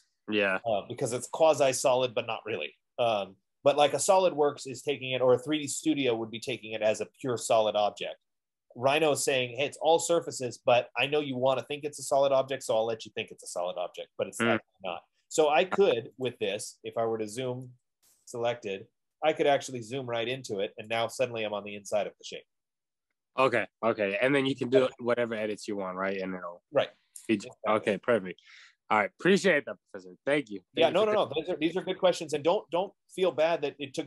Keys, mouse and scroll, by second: 16.9 click, 18.0-18.5 typing, 19.9 middle click, 19.9-20.7 scroll, 19.9 z, 23.2 middle click, 23.2 typing, 25.6 right click, 28.5 Escape, 29.0 scroll, 31.9 right click, 31.9-32.6 scroll, 33.1 scroll, 33.8 click.